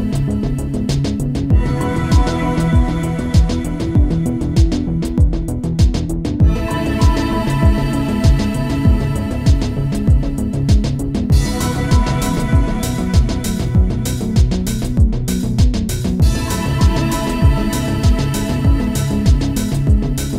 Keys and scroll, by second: 6.5 space, 7.8 space, 14.2 space, 15.8 space.